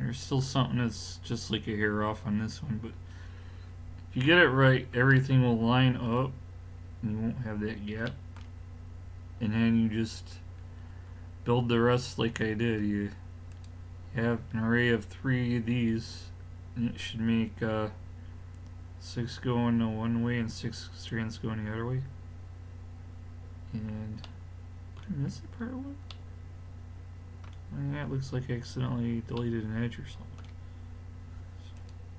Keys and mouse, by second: 1.5-5.3 middle drag, 13.5-14.6 drag, 14.6-24.3 middle drag, 31.8-32.1 drag.